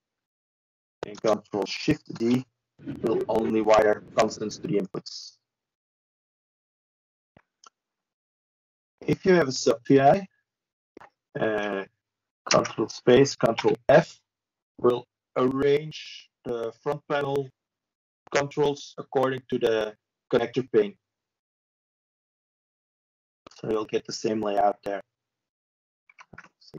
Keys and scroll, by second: 22.1 ctrl+e.